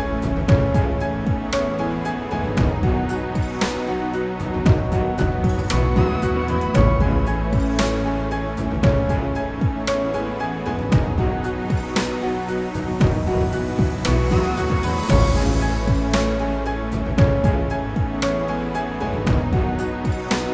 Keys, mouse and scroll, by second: 0.1 click, 2.7 click, 3.1 double click, 4.6 click, 5.0 double click, 7.3 click, 7.6 double click, 9.0-9.3 scroll up 1, 10.6 click, 12.1 F4, 12.6 click, 13.7 double click, 17.3 click, 18.6 click.